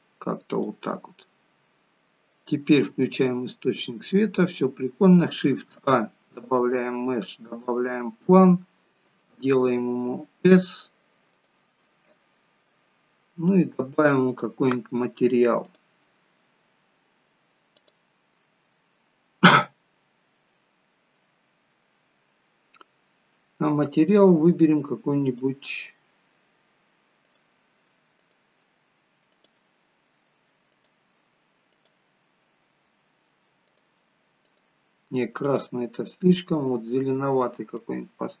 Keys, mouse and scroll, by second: 3.2 click, 3.8 middle click, 5.6 shift+a, 9.1 s, 14.3 click, 15.7 click, 31.7 click, 35.5 click.